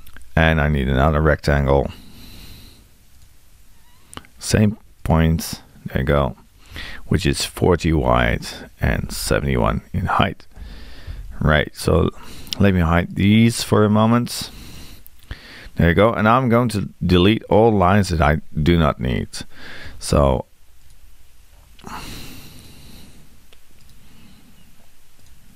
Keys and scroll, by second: 6.7 Tab, 19.8 t.